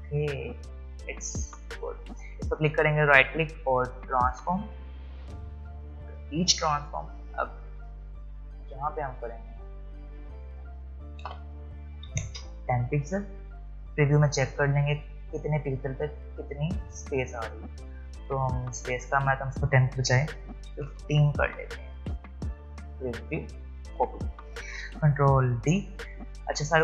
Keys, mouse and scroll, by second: 2.1 click, 2.8 right click, 5.1-10.3 drag, 13.8 click, 16.1 click, 22.7 click, 25.6 ctrl+d.